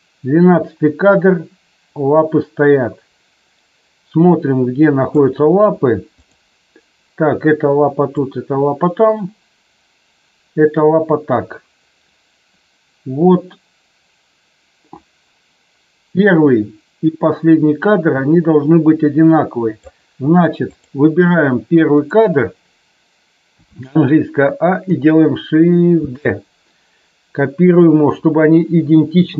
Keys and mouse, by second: 6.1 click, 8.2-19.9 drag, 20.7 click, 22.0 click, 23.5 a, 26.0 shift+d, 27.7 click.